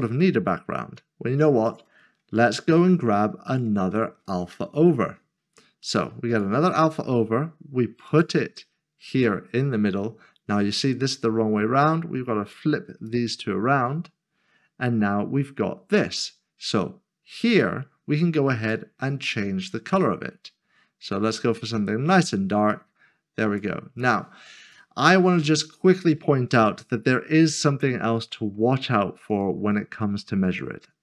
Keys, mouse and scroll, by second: 2.4 s, 3.1 a, 3.5 click, 4.8 typing, 6.3 click, 13.0 click, 17.5 click, 26.3 click, 26.8-27.9 scroll down 1, 27.9 middle click, 29.3 click.